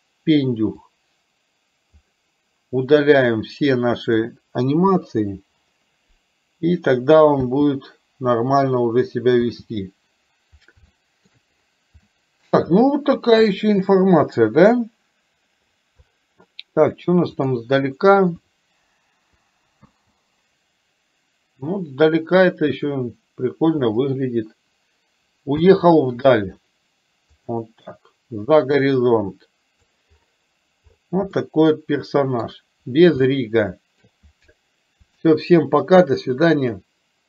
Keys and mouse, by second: 1.0-2.2 drag, 3.4 click, 4.9 Delete, 7.4 space, 10.9-11.3 shift+middle drag, 12.0-12.4 shift+middle drag, 17.5 click, 19.9 space, 25.5 space, 27.5 click, 28.9 click, 31.4-32.5 middle drag, 33.3 shift+middle click.